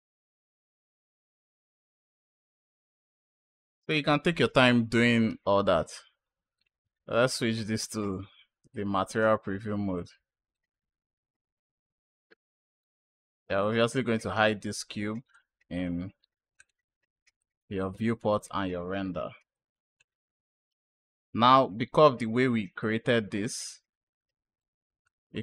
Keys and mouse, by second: 0.3 space, 2.7 space, 2.7-3.6 drag, 7.1 click, 10.4 click, 12.7 click, 15.2 click, 16.4 click, 17.3-18.0 drag, 20.7 click, 22.7 click, 24.9 click.